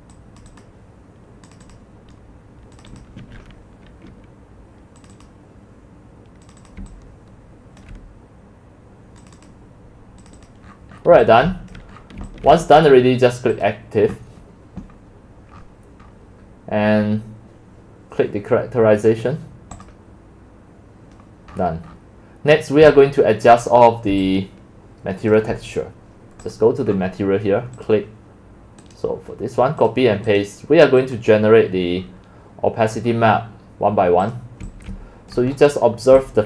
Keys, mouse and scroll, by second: 0.6-2.0 drag, 2.9 click, 3.3 q, 5.1 click, 6.5 click, 6.6 click, 6.8-8.0 c, 6.9 click, 9.3 click, 9.5 click, 10.2 click, 10.7-11.2 scroll up 15, 11.2 x, 11.5 c, 11.8 click, 12.0 middle click, 12.0 scroll, 12.6 c, 12.8-15.6 drag, 15.6-17.2 scroll down 10, 15.7-19.9 middle drag, 17.2 scroll down 1, 17.4 scroll, 19.9-21.5 drag, 21.5-22.7 scroll up 14, 22.9-25.5 typing, 23.6 click, 26.6 click, 26.9 scroll, 28.3-32.0 drag, 28.9 right click, 32.0 middle click, 32.0 scroll, 32.1-33.0 scroll down 5, 32.8 middle drag, 33.1-33.4 middle drag, 33.1 scroll, 33.2 scroll up 3, 34.4 click, 34.7 x, 35.0 c, 35.4 click, 35.7-36.2 scroll down 7, 36.2 x.